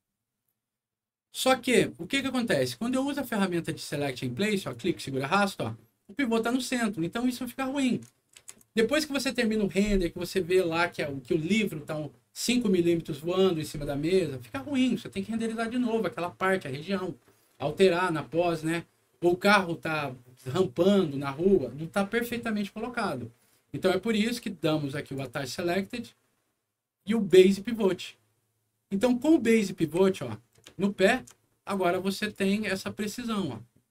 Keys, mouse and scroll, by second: 0.0 scroll down 2, 3.7 click, 4.6-7.8 drag, 8.3 ctrl+z, 25.0 click, 27.1 click, 29.4 middle click, 29.8 w, 30.7 alt+middle click, 32.1 alt+click, 32.9-33.9 alt+drag.